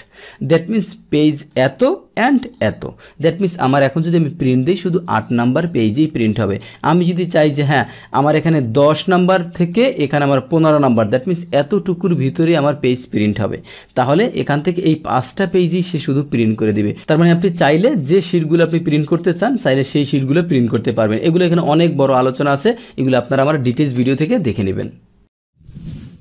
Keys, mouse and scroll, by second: 1.5 click, 2.4 click, 7.3 click, 9.7 click, 14.4 click.